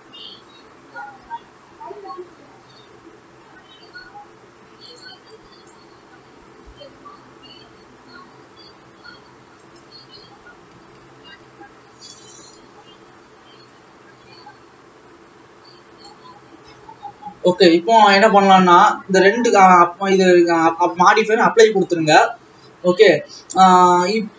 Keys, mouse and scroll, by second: 5.5 click, 6.8 g, 10.4 alt+a, 11.8 ctrl+s, 11.8 Tab, 12.4 click, 16.4-17.7 scroll down 5, 17.7 ctrl+s, 18.0-18.8 scroll up 4, 19.6-20.6 drag, 21.3 click, 22.0 ctrl+s, 22.4-23.8 scroll down 1, 23.8-24.3 drag.